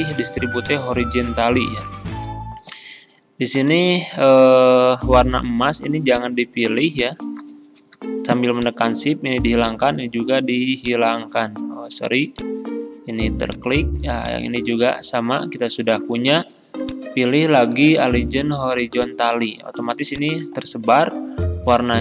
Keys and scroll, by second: 3.7 ctrl+z.